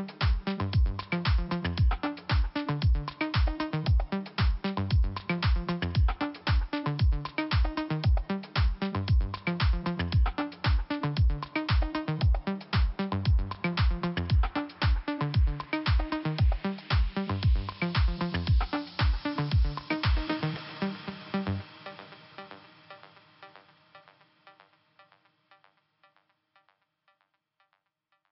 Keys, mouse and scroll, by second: 0.3 click, 4.6 click, 6.2 click, 7.3 click, 8.4 click, 10.1 click, 10.9 scroll up 1, 11.5 click, 12.5 click, 13.8 click, 14.4 click, 16.9 click, 17.6 click, 19.2-19.7 scroll up 1, 19.7 click, 21.0 click, 21.4 click, 21.8-22.3 scroll down 2, 23.1 click, 24.7 click, 26.1 click, 27.2 click.